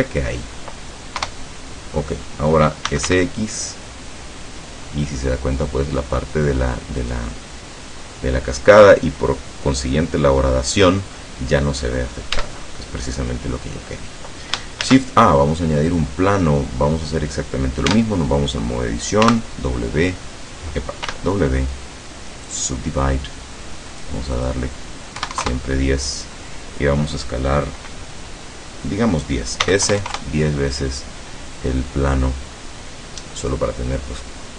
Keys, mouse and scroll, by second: 0.2 scroll down 1, 0.6-0.9 scroll up 2, 1.2 KP_0, 2.7-3.6 typing, 7.0 click, 12.4 Tab, 14.8 shift+a, 15.9 click, 17.9 Tab, 19.3 w, 21.1 w, 22.5 click, 23.9 click, 24.4 click, 25.2 KP_1, 25.4 KP_0, 29.7 s, 29.9 KP_1, 30.0 KP_0, 30.2 KP_Enter.